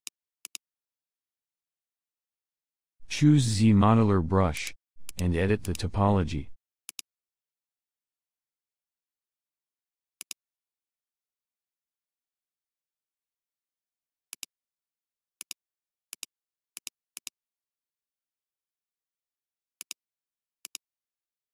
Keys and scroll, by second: 1.8 b, 3.0 z, 3.7 m, 9.1 space.